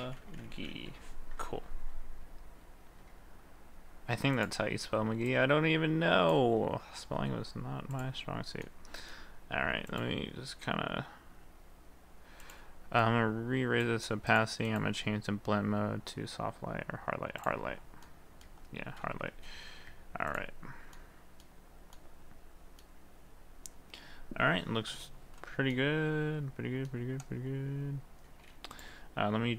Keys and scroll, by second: 7.0 ctrl+s, 19.4 ctrl+d.